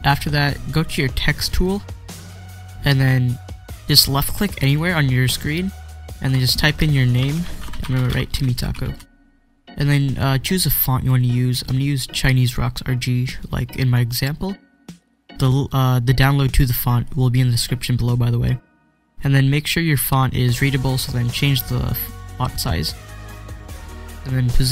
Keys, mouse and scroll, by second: 1.5 click, 4.6 click, 4.8 click, 6.8-9.1 typing, 10.0-12.4 drag, 21.2-24.7 drag.